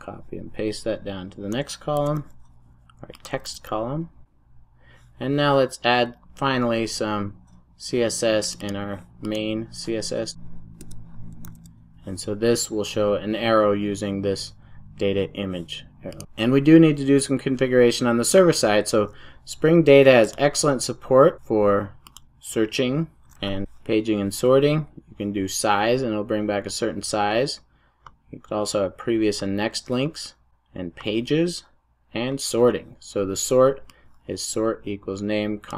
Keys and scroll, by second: 1.9 super+c, 3.9 super+v, 4.2 super+s, 10.8 Return, 11.3 super+s.